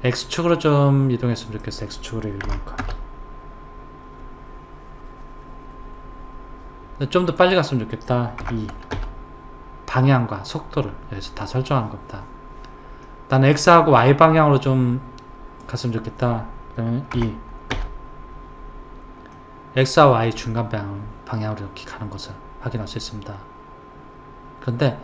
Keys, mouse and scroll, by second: 1.5 click, 7.4 click, 13.1-15.6 middle drag, 15.6 click, 19.3-22.4 middle drag.